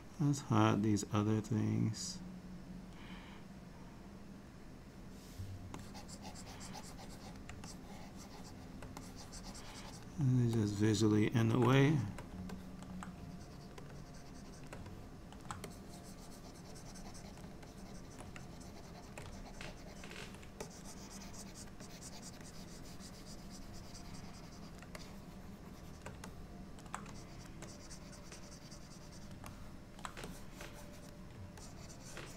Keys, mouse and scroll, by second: 2.4 click, 3.5 click, 5.8 click, 7.7 shift+click, 9.1 click, 10.6 middle click, 11.8 shift+click, 12.6 middle click, 13.3 shift+click, 13.9 shift+click, 14.0 shift+click, 15.0 middle click, 15.8 ctrl+click, 17.7 ctrl+click, 18.4 shift+click, 19.3 click, 19.4 ctrl+click, 20.7 ctrl+click, 21.9 click, 22.5 click, 25.0 shift+click, 25.8 shift+click, 26.3 middle click, 27.2 shift+click, 27.7 click, 29.6 middle click, 30.3 click, 31.7 ctrl+click.